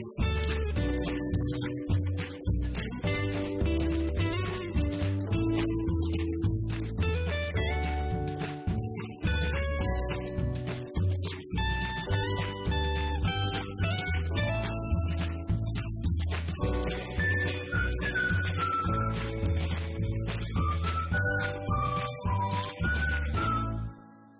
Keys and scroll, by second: 0.7-7.5 typing, 9.8 shift+r, 10.1 d, 12.0-13.1 typing, 15.3 Down, 17.5 Return.